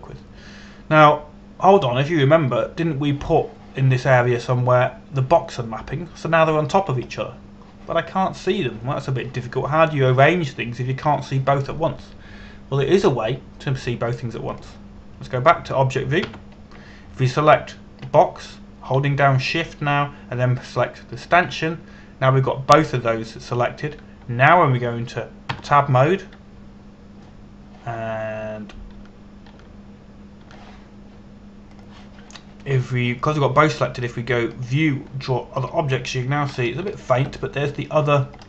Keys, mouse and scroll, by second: 0.2-0.6 scroll up 1, 0.9 shift+middle click, 16.2 click, 17.9 Tab, 19.7 right click, 22.8 shift+right click, 27.1 Tab, 30.2 a, 30.6 a, 31.2 a, 32.0 a, 33.4 click, 38.2 scroll up 1.